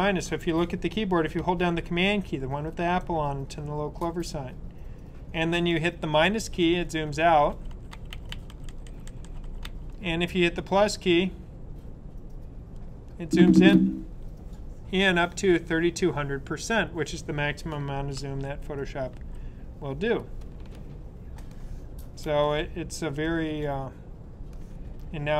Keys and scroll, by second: 5.9 super+-, 6.4 super+-, 6.7 super+-, 7.0 super+-, 7.2 super+-, 7.4 super+-, 7.6 super+-, 7.8 super+-, 8.0 super+-, 8.2 super+-, 8.4 super+-, 8.6 super+-, 8.8 super+-, 9.0 super+-, 9.2 super+-, 9.3 super+-, 9.5-11.8 typing, 18.1-18.9 typing, 18.5 super+-, 19.1 super+-.